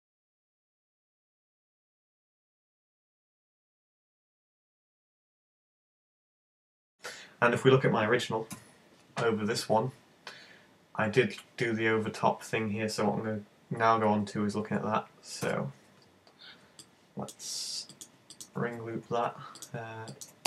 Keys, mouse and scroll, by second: 0.3 click, 0.6 right click, 0.7 shift+right click, 0.9 shift+right click, 1.2 space, 1.5 s, 1.8 click, 1.9 g, 2.9 click, 3.0 middle click, 3.9 scroll up 5, 4.0 shift+middle click, 4.3 right click, 4.5 shift+right click, 5.9 middle click, 6.0-6.6 scroll down 6, 6.2 middle click, 6.6 middle click, 7.0 scroll up 1, 8.5 `, 14.0 z, 14.5 z, 15.5 `, 16.1-16.9 scroll up 6, 16.9 shift+middle click, 17.9 right click, 18.3 shift+right click, 19.6 right click, 20.1 shift+right click.